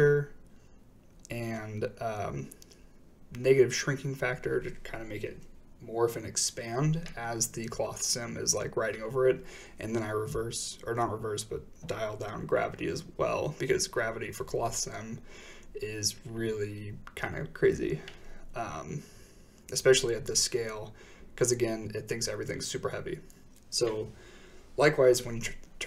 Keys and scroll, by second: 5.1 typing, 6.2 Return, 8.7 typing, 9.2 Return, 11.2 a, 19.0-19.9 typing, 20.4 Return.